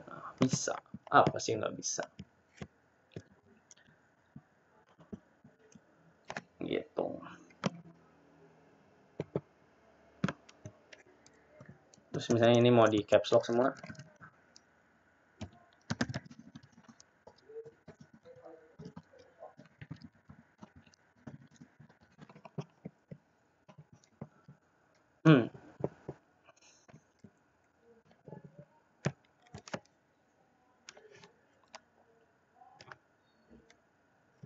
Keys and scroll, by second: 14.1 ctrl+a, 14.1 Caps_Lock, 14.1 t, 22.9 typing.